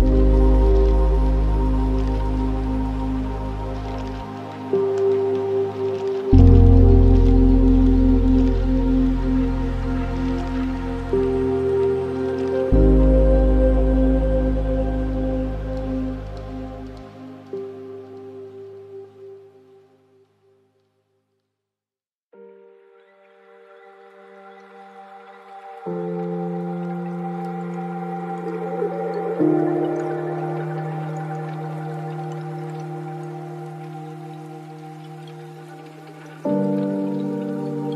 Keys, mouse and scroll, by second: 0.5-3.5 shift+drag, 5.6 ctrl+z, 5.9-6.8 scroll down 13, 6.8-8.4 middle drag, 8.4 shift+a, 12.4-13.2 alt+right drag, 13.2-13.7 scroll down 6, 13.7 click, 14.7 click, 17.0-17.4 scroll up 6, 17.4-19.7 middle drag, 19.7 click, 20.5 click, 26.1 click, 26.6 shift+d, 27.7-28.1 scroll up 4, 28.1-29.6 drag, 29.6-31.0 scroll down 8, 31.1-32.6 alt+right drag, 32.6-33.9 middle drag, 33.9-34.3 scroll down 5, 34.3-35.3 middle drag, 35.3 scroll up 3, 36.2-37.9 middle drag.